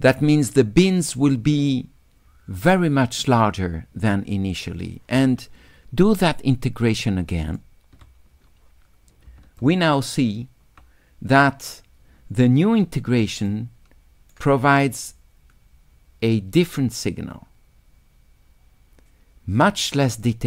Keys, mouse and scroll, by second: 0.0 click, 0.3 click, 6.1 s, 6.3 click, 6.4 right click, 6.6 click, 9.6 shift+click, 13.5 shift+click, 20.2-20.4 right drag.